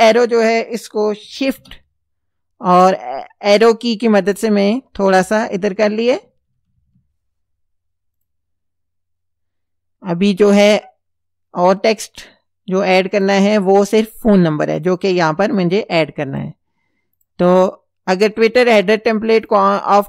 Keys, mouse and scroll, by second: 1.6 shift+Right, 5.6 shift+Right, 8.2 click, 13.2 click, 14.7 click, 15.5 right click, 16.4 click, 17.2 click, 19.4 click.